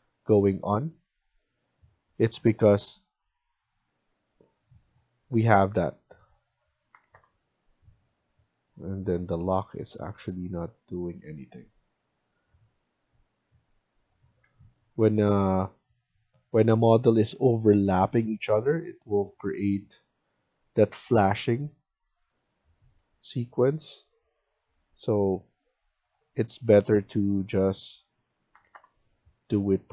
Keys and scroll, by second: 6.6-7.5 typing, 11.9 Escape, 12.2 Escape, 14.3 Escape, 18.0 Escape, 22.9 Escape, 28.4 typing.